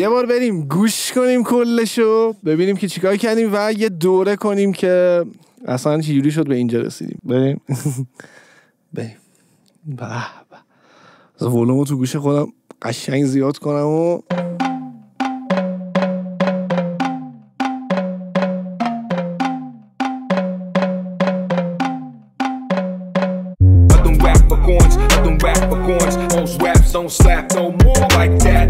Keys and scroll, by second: 14.1 space.